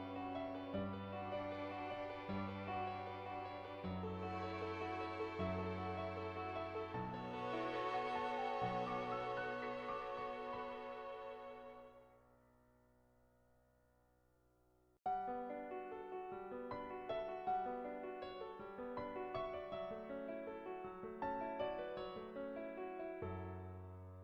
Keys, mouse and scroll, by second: 0.1 click, 1.1-8.5 drag, 10.2 click, 11.3 ctrl+z, 14.0 click, 14.6 ctrl+z, 14.9 click, 15.9 ctrl+z, 17.6 middle click, 19.2 click, 20.8 g, 22.2-23.3 middle drag, 23.9 shift+middle click.